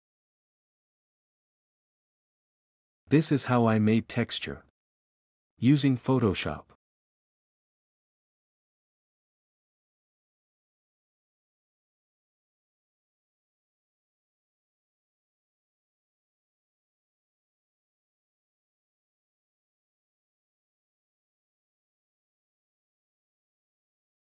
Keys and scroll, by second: 2.2-3.5 typing, 5.4-8.4 typing, 10.5 Escape.